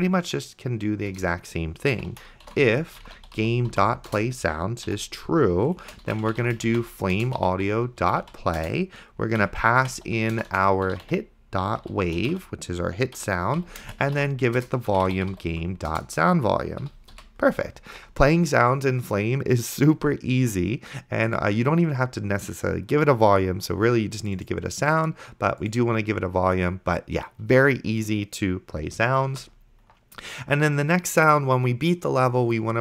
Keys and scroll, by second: 1.4 Return, 1.7-4.3 typing, 4.9 End, 5.9-16.0 typing, 7.2 Return, 13.2 Right, 16.9 End, 17.2 ;, 29.7 ctrl+s.